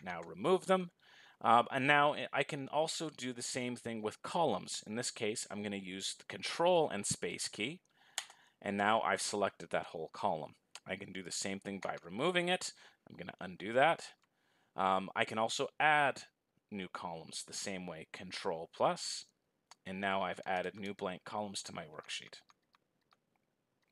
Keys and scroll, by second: 7.5 ctrl+space.